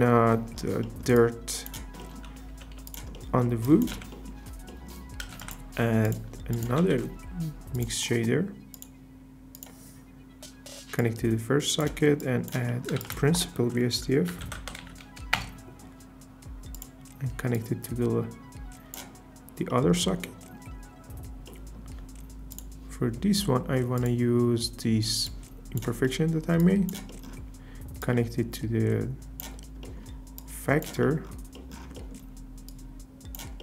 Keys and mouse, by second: 2.5 g, 3.6 click, 4.0 x, 5.3 shift+a, 6.5 click, 6.8 shift+d, 8.7 click, 9.5 click, 11.0 drag, 12.2 click, 13.0 shift+a, 16.7 typing, 28.0 click, 29.8-30.4 middle drag, 30.4 click, 31.5 click, 32.7 drag.